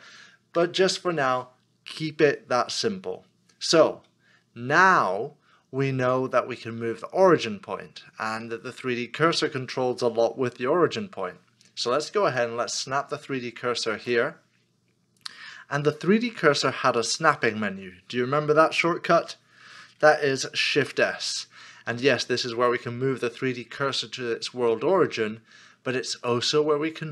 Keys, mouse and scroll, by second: 12.6 shift+right click, 20.5 s.